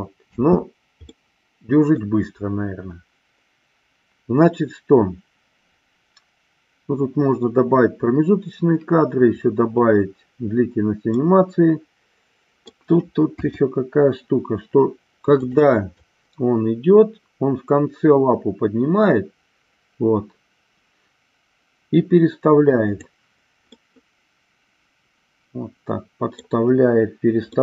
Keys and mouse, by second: 0.2 space, 1.0 middle click, 11.3-12.8 middle drag, 13.4 KP_2, 15.3 click, 16.0-23.0 drag, 23.8-26.5 middle drag, 27.5 middle click.